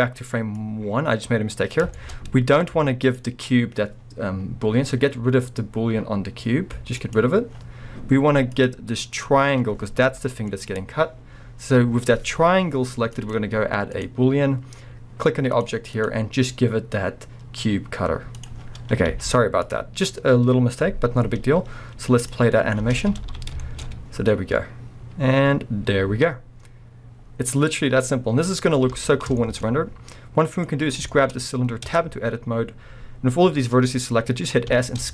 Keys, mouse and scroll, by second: 0.5-2.0 drag, 2.0-3.0 shift+middle drag, 2.1 scroll up 1, 3.0 click, 7.0-8.7 drag, 9.1 click, 10.1 g, 10.7 right click, 13.2-15.6 drag, 15.9-23.6 drag, 18.7 scroll down 1, 19.1 z, 22.8 space, 23.4 scroll down 2, 23.6 shift+middle click, 23.9 scroll up 2, 26.2 scroll down 2, 26.6-27.6 middle drag, 28.1 scroll up 1, 28.9 space, 29.4 shift+middle click, 29.7-30.5 scroll up 1, 30.5 click, 30.8 scroll up 1, 31.1 shift+middle click, 31.4-31.8 scroll up 1, 31.9 b, 32.2-34.7 scroll up 1.